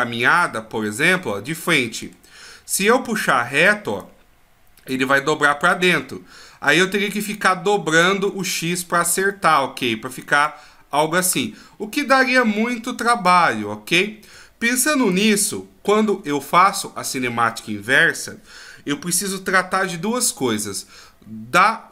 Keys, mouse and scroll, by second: 1.1 middle click, 4.0 click, 6.7 click, 11.3 click, 14.9 a, 15.1 a.